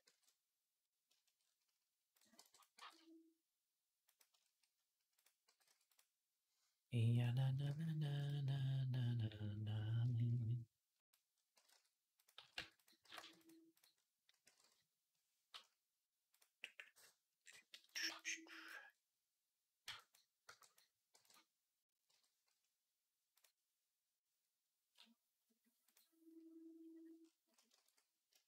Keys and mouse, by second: 0.0 middle click, 0.9 shift+click, 1.2 middle click, 1.9 click, 2.0-16.1 middle drag, 2.2 b, 2.6 g, 5.4 g, 7.3 g, 11.4 g, 12.2 g, 12.8 g, 16.1 click, 16.2-17.9 middle drag, 17.9-25.8 drag, 19.6 b, 20.2 b, 20.9 b, 21.9 m, 25.8-27.1 middle drag, 27.6 ctrl+s, 28.5 middle click.